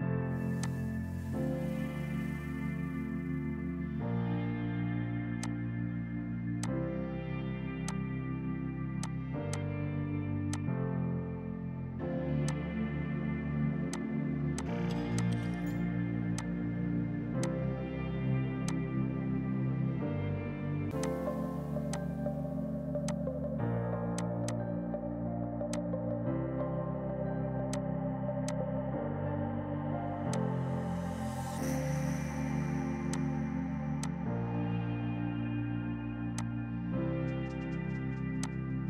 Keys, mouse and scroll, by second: 0.4 ctrl+Num_Lock, 0.7 click, 14.6 click, 14.9 shift+Page_Down, 15.2 shift+click, 16.2 Escape, 16.4 click, 17.5 shift+click, 18.7 click, 21.4 F3, 21.8 F2, 22.0 click, 24.9 Return, 25.8 click.